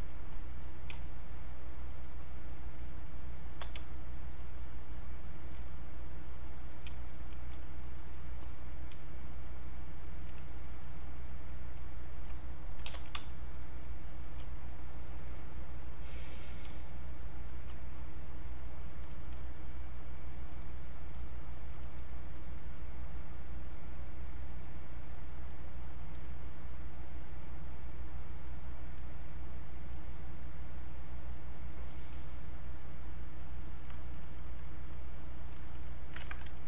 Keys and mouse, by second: 0.1 click, 0.9 space, 2.2 click, 5.7 click, 6.9 space, 7.3 click, 7.4 space, 7.6-9.0 drag, 9.0 space, 9.5 click, 9.7 space, 10.4 click, 12.5-13.6 typing, 13.5 click, 14.8 click, 16.7 space, 17.0 click, 17.2 space, 17.9-21.1 drag, 21.1 space, 21.6 click, 21.7 space, 21.8 click, 25.5 space, 25.7 click, 26.0 space, 26.3-33.4 drag, 34.9 click, 35.6 alt+click, 36.2 ctrl+z.